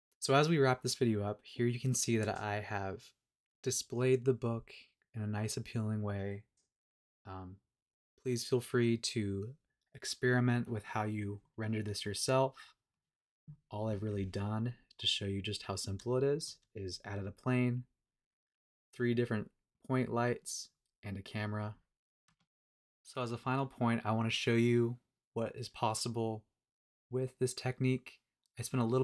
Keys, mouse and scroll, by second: 13.1 click, 13.5-14.0 scroll down 1, 14.0-14.7 middle drag, 14.4-15.0 scroll down 3, 15.0-16.4 middle drag, 18.3 click, 19.3 click, 19.7 click, 20.6 click, 21.0-21.9 middle drag, 22.2 KP_0.